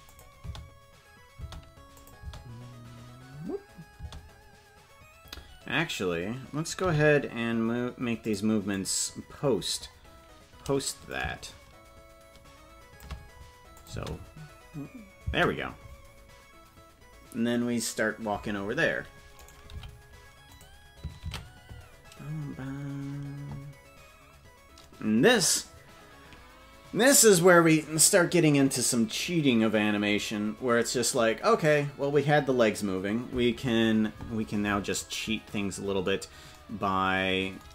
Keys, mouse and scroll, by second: 0.0 click, 0.3 space, 1.8 space, 1.9 click, 2.1 space, 4.9 space, 6.8 g, 8.7-9.7 drag, 11.0-13.0 shift+drag, 13.7 click, 13.9 space, 15.3 space, 19.3 right click, 19.6 g.